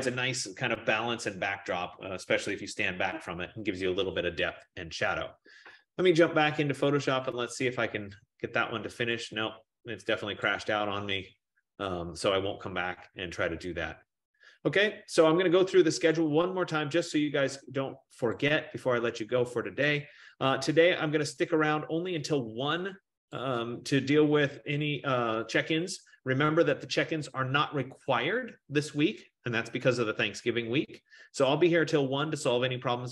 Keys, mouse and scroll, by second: 7.6 click, 9.4 click, 11.5 click, 18.0 F15.